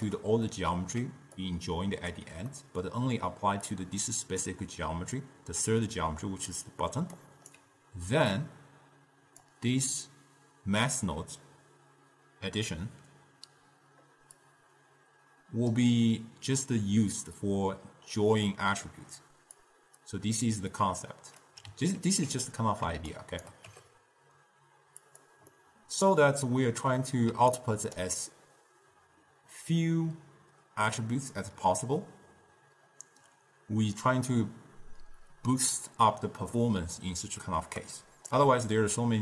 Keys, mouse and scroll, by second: 0.0-1.2 ctrl+middle drag, 1.2 d, 1.7 click, 2.3 d, 2.6 middle click, 3.4 d, 3.8-4.6 drag, 4.6 d, 5.5 d, 7.0 d, 7.3 right click, 7.7 d, 8.5 drag, 14.5 drag, 19.7 click, 21.0-22.1 drag, 22.1 ctrl+x, 23.3 shift+right click, 23.8 g, 25.7-27.5 middle drag, 27.5 d, 27.7 right click, 28.2 d, 37.6 d, 37.9 right click, 38.5 d.